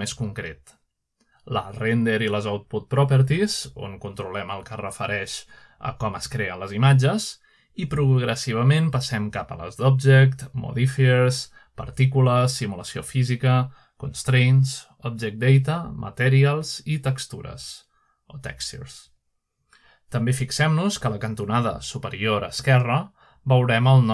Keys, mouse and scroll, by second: 0.0 click, 1.0 click, 3.6 click, 4.7 click, 9.1 click, 12.2 click, 13.3 click, 14.3 click, 15.9 click, 16.8 click, 19.0 click, 19.9 click, 21.6 click.